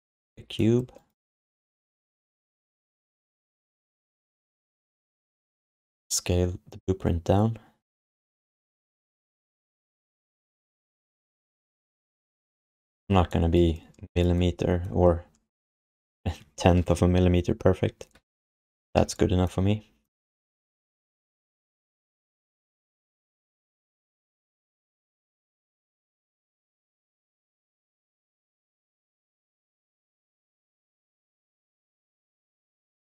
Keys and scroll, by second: 3.8-5.3 typing, 12.4 q, 18.9 w, 22.3 ctrl+s, 28.3 alt+q, 28.6 alt+q, 31.1 space, 31.9 space.